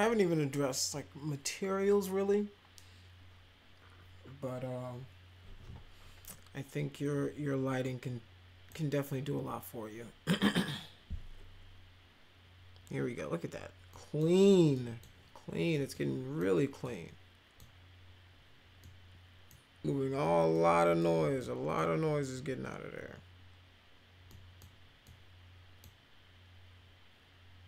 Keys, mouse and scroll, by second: 7.8 middle click, 13.8 middle click, 14.7 middle drag, 15.8-16.3 middle drag, 16.8 middle click, 18.7 middle click, 20.5-20.9 middle drag, 21.3 middle click, 24.2 middle click, 25.0 middle click.